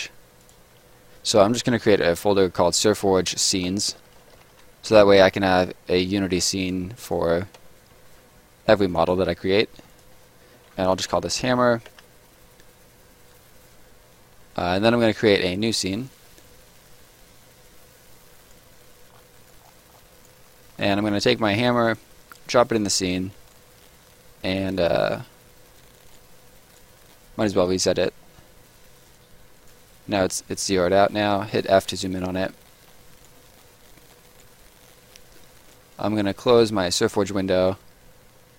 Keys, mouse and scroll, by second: 1.4-4.9 typing, 1.5 shift+click, 6.6 click, 7.5 s, 8.0 Return, 8.8 click, 10.6 shift+click, 10.6-12.0 typing, 12.3 Return, 15.2 click, 17.7 click, 19.0 scroll up 1, 19.3 right click, 19.6-20.0 scroll up 1, 20.1 right click, 20.4 middle click, 20.7-21.8 scroll up 1, 21.8 click, 23.2 scroll up 1, 23.4 right click, 23.7-24.0 scroll down 1, 24.4 middle click, 25.8 right click, 27.0 middle click, 29.0 click, 30.9 middle click, 31.1-31.5 scroll up 1, 31.5 f, 32.0 right click, 32.3 middle click, 34.4 right click, 35.0 middle click, 35.3 scroll down 1, 35.5 right click, 37.2 middle click.